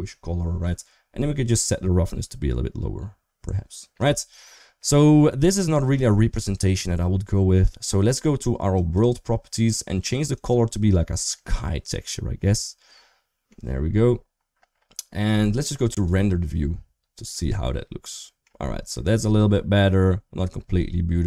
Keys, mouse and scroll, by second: 1.5-3.9 drag, 4.7 middle click, 5.9 shift+middle click, 6.2 middle click, 8.6 click, 10.3-11.7 drag, 12.7 middle click, 17.1-18.2 middle drag, 19.0-20.3 middle drag.